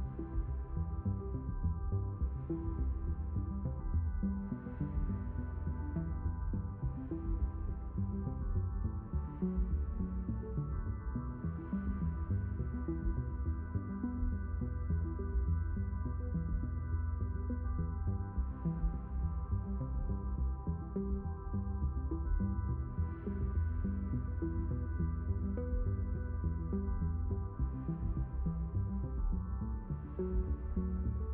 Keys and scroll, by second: 0.2 s, 4.0 q, 6.4 s, 10.5 q.